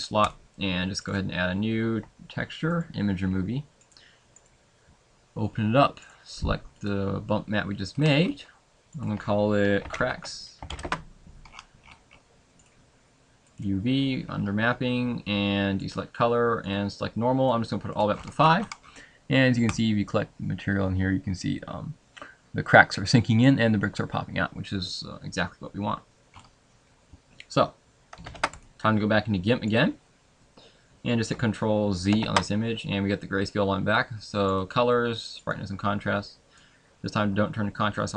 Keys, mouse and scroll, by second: 0.4 click, 0.4-2.8 scroll up 10, 2.9 click, 7.2 click, 26.6 scroll up 3, 28.3 ctrl+s.